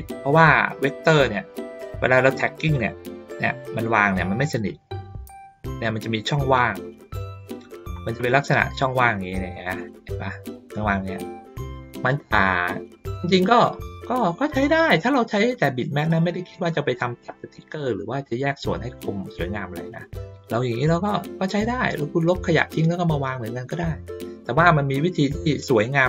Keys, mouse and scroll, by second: 7.9 ctrl+middle drag, 9.8 middle click, 12.0 ctrl+middle click, 12.6 ctrl+middle click, 14.1 ctrl+middle click, 17.2-21.9 drag, 24.9-25.6 drag.